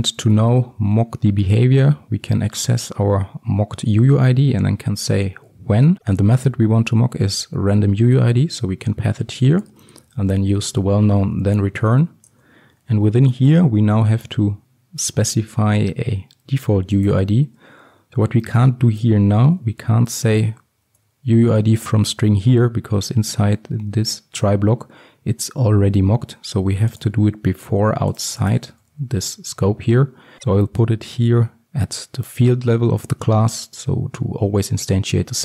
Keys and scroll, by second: 0.4 Return, 6.0 Return, 12.4 Return, 21.0 Return.